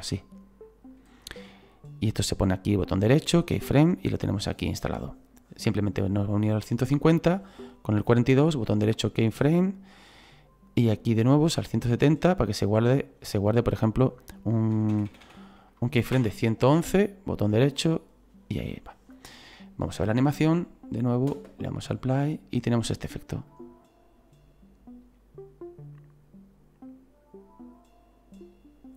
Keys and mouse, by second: 2.7 right click, 3.4 click, 5.5 click, 8.0 right click, 9.5 click, 13.6 click, 14.9 KP_1, 16.1 Return, 16.9 right click, 19.1 click, 20.7 click, 23.5 right click.